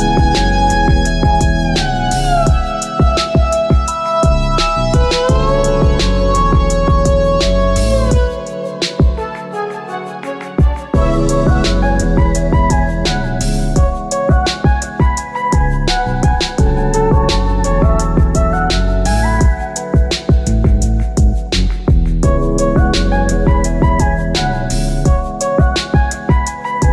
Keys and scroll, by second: 10.4 Return.